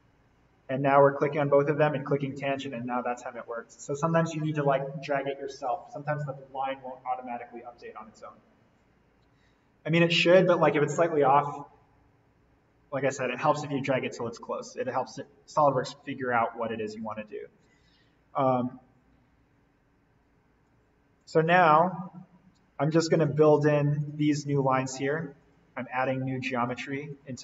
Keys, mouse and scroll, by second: 3.3-4.0 scroll up 1, 14.7-17.1 scroll down 1, 17.1 Escape, 18.0-21.2 drag, 23.3 l, 27.1 Escape.